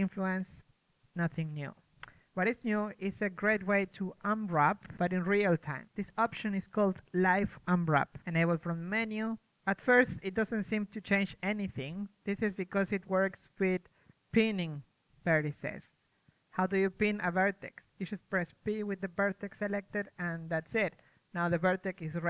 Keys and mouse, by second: 9.1-11.3 right drag, 11.3 o, 12.2 g, 13.3-19.0 drag, 13.8 g, 16.5 g, 17.6 g, 19.0 p, 20.1 a, 21.8 g.